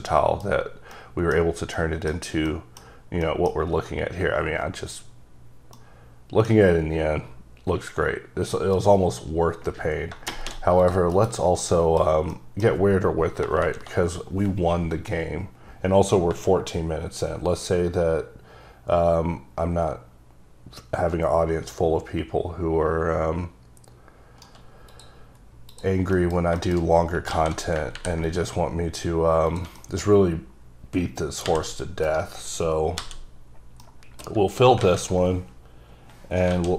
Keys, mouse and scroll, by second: 0.1 middle click, 1.0 middle click, 1.4 scroll down 1, 1.9 middle click, 2.6 middle click, 3.3 middle click, 3.7-4.2 scroll up 2, 5.1 scroll down 1, 5.9 middle click, 10.9 click, 11.3 KP_Decimal, 11.7 middle click, 12.4 middle click, 16.8 right click, 25.0 click, 25.8 click, 26.3 middle click, 26.7 double middle click, 26.9-27.2 scroll up 3, 27.4 a, 28.0 ctrl+r, 28.4 click, 29.6 click, 29.9 middle click, 30.2-30.8 scroll up 3, 31.6 v, 32.1 right click, 33.1 f, 33.9 middle click, 34.9 alt+a, 35.7 scroll down 2, 36.6 alt+a.